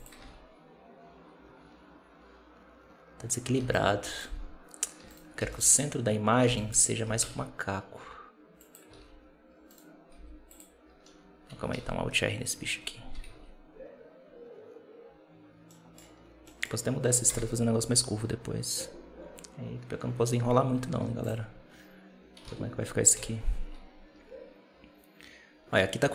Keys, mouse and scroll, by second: 0.1 alt+a, 3.4 b, 5.0 shift+right click, 5.3 b, 6.3 b, 6.9 g, 8.9 alt+a, 9.6-10.0 right drag, 10.0 r, 11.6 alt+r, 13.2 alt+a, 15.6-15.9 middle drag, 15.9-16.3 scroll down 1, 16.3-17.1 middle drag, 17.1 KP_0, 20.5 z, 22.8 alt+a, 23.0 z.